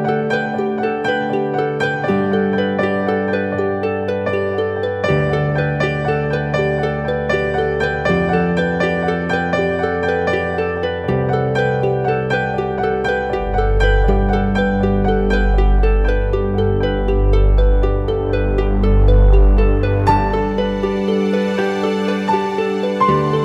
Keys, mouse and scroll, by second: 0.0-0.3 typing, 10.9 double click, 18.8 double click.